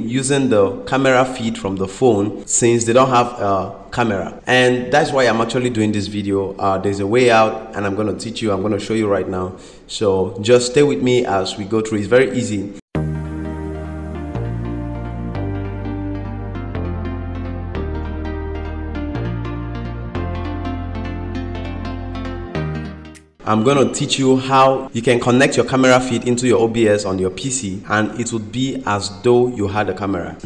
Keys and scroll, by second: 23.4 ctrl+m.